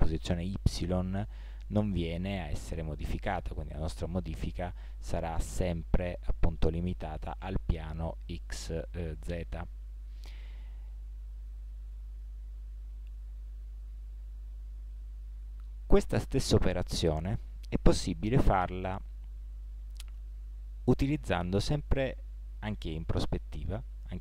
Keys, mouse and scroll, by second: 16.4-21.1 middle drag.